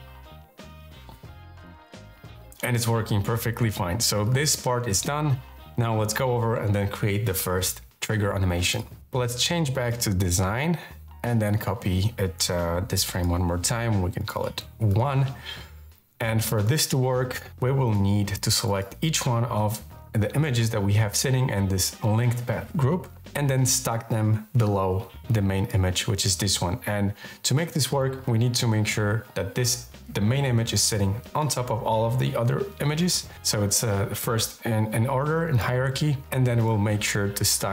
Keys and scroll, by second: 14.4 1.